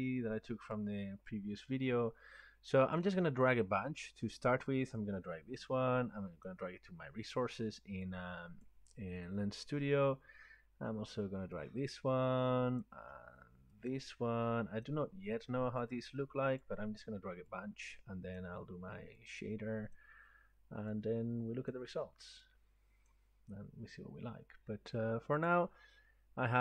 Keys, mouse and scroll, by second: 3.0 click, 6.5 click, 8.7 click, 9.9 scroll down 2, 12.8 click, 14.8 click, 16.6 click, 18.4 click.